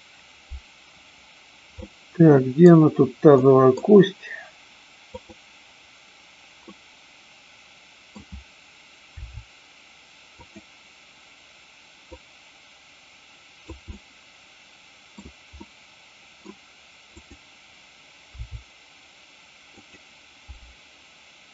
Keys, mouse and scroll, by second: 1.8-2.6 middle drag, 3.4 middle click, 5.0-6.1 drag, 6.8-8.1 middle drag, 9.1 r, 10.4 click, 12.0-13.8 drag, 13.9-15.1 middle drag, 15.8 middle click, 17.1-18.1 drag, 18.4 r, 19.8 click, 20.5 g.